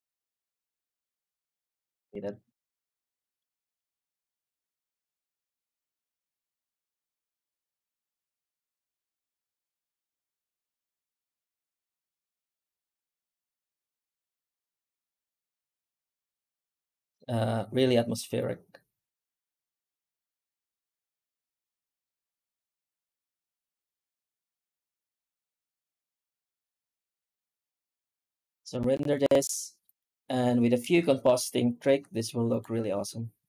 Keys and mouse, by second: 0.0 middle click, 1.0 middle click, 2.0 middle click, 2.8 shift+middle click, 3.6 shift+middle click, 4.6 middle click, 5.7 shift+middle click, 7.2-14.0 drag, 15.7 z, 17.3 z, 20.9-27.4 drag, 29.1 z, 31.7 z.